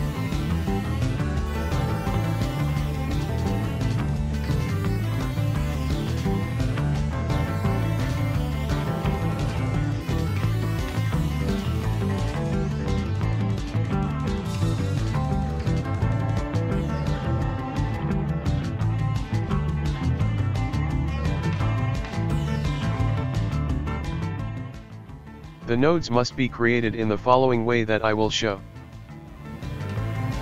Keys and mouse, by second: 6.0-9.2 drag, 10.8-12.7 ctrl+middle drag, 12.7 right click, 13.8 x, 16.1 shift+a, 25.8 shift+a.